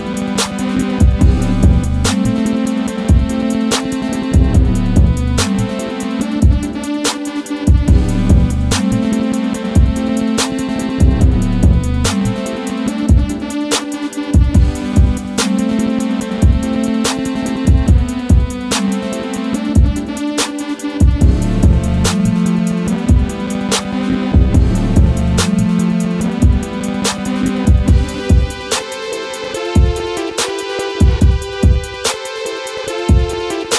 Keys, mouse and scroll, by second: 0.0 click, 0.4 right click, 1.6 click, 2.7 right click, 3.9 click, 5.3 shift+Page_Up, 6.3 click, 9.5 click, 10.8 right click, 13.0 right click, 15.0 right click, 17.7 right click, 18.6 click, 20.3 click, 21.6 right click, 24.0 F4, 24.5 click, 27.0 click, 31.2 scroll up 1, 32.1 right click, 32.9 click, 33.7 scroll down 1.